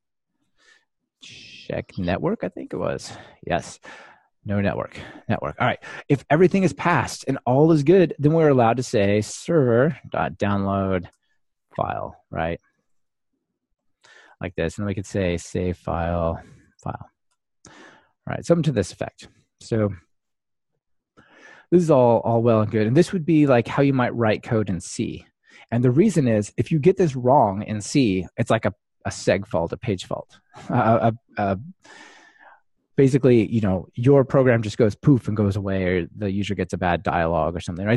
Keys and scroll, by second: 2.6 Return, 11.2 Return, 16.0 Return.